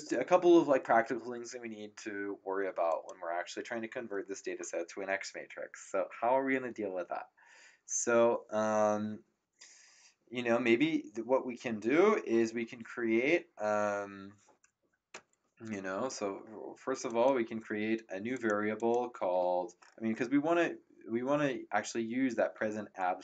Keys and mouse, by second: 2.9 click, 15.1 Up, 17.0 click, 18.3 click.